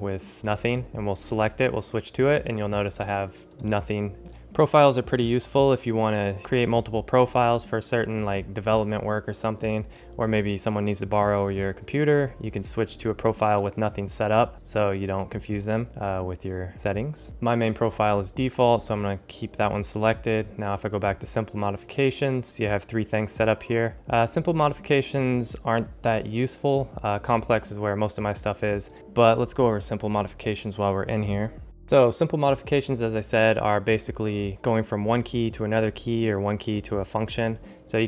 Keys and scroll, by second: 31.6 ctrl+alt+shift+super++.